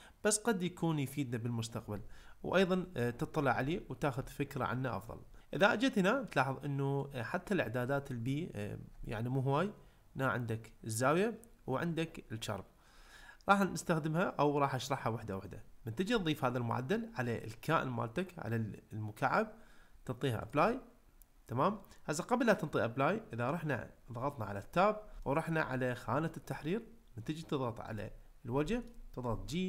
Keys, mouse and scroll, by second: 3.7-4.2 ctrl+middle drag, 7.0 click, 20.5-21.7 drag, 25.2 shift+middle click, 28.7 shift+middle click, 29.2 g.